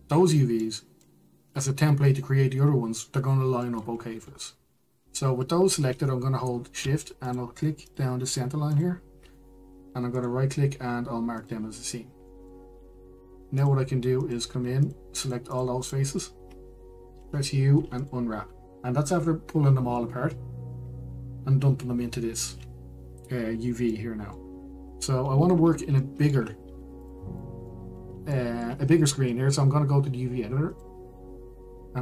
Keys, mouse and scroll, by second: 0.1-2.6 middle drag, 4.9 middle click, 5.6 shift+middle click, 12.8 right click, 13.6-14.9 middle drag, 14.9 click, 16.8 shift+click, 17.4 shift+click, 19.4 u, 27.3 middle click, 27.9 Tab, 28.4 click, 28.6 middle click, 29.6-32.0 shift+middle drag.